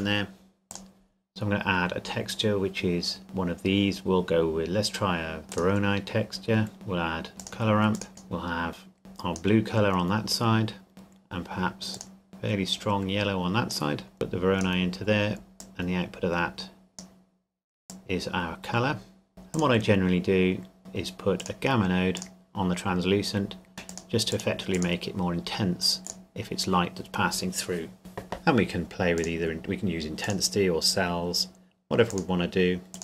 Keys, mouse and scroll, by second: 0.7 click, 5.5 click, 7.4 click, 19.5 click, 22.4 click, 29.2 click.